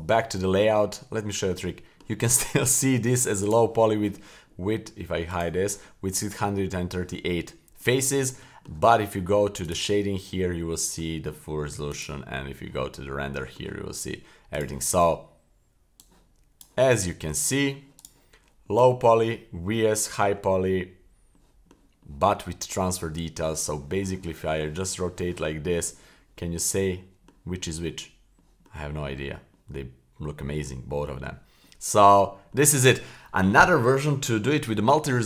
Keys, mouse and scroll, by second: 0.0 click, 0.7-1.3 scroll down 2, 1.3 scroll up 2, 1.6-2.0 middle drag, 2.5 shift+middle drag, 2.9 middle click, 3.4 right click, 5.3 click, 7.5-7.8 scroll up 1, 7.8-8.3 middle drag, 8.4 shift+middle drag, 9.7 click, 10.6 middle click, 11.9 click, 13.3-13.6 middle drag, 14.6 click, 16.0-16.7 drag, 16.9-17.4 shift+middle drag, 17.4 scroll down 2, 18.0 right click, 18.6-19.1 middle drag, 19.8-20.3 middle drag, 21.3-21.7 middle drag, 22.0-22.4 middle drag, 23.0-23.4 middle drag, 23.6-25.4 middle drag, 26.4 middle drag, 27.0-27.3 middle drag, 27.6 middle drag, 28.4-28.7 middle drag, 29.5 middle drag, 30.4 middle drag, 31.0 middle drag, 31.6 middle click, 32.2 middle click.